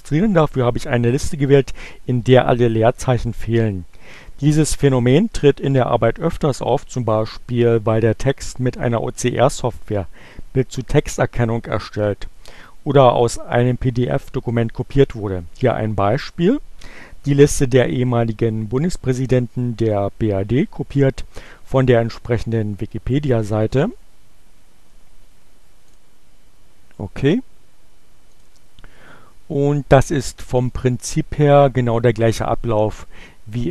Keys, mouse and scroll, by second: 25.6 click, 27.7 click.